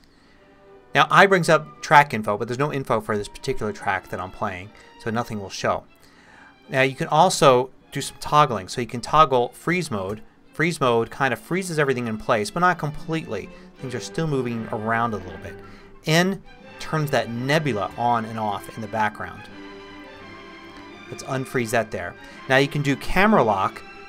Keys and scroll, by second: 10.1 x, 16.4 n, 17.9 n, 20.2-21.5 typing.